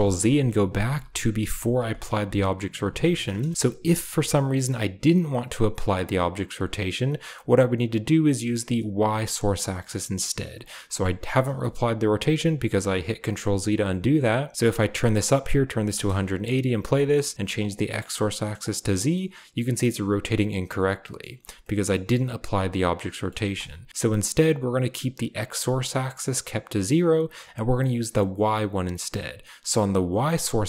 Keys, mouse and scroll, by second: 0.1 ctrl+z, 0.4 ctrl+z, 0.8 ctrl+z, 1.4 ctrl+z, 1.8 ctrl+z, 2.1 ctrl+z, 2.7 ctrl+z, 3.1 click, 3.7 r, 11.6 shift+middle drag, 14.8 click, 15.9 space, 17.5-18.7 drag, 19.2-20.6 middle drag, 19.5-20.6 drag, 21.1 click, 21.1 middle click, 21.6-22.1 middle drag, 23.2 middle click, 23.4 space.